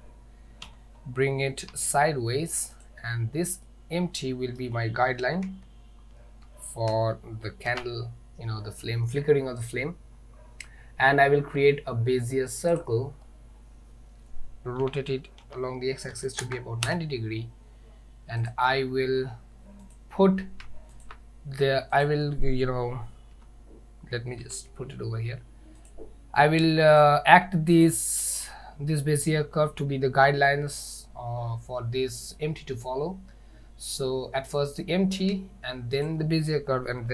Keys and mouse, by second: 0.7 g, 3.7-4.6 middle drag, 5.5 KP_1, 7.7 shift+a, 14.9 r, 18.5 click, 20.0 click, 21.1 shift+click, 22.1 click, 23.4 g, 27.8 click, 36.1 shift+click.